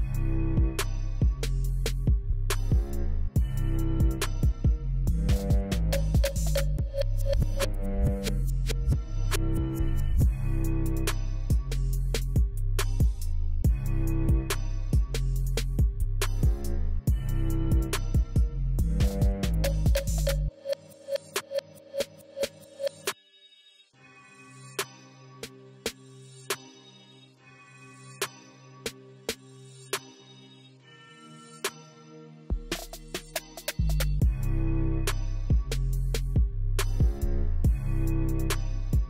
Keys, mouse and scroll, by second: 2.2 5, 2.4 Tab, 2.7 5, 3.1 Tab, 12.2 5, 12.4 Tab, 12.6 5, 12.8 Tab, 18.3 5, 18.4 Tab, 18.6 5, 18.7 Tab.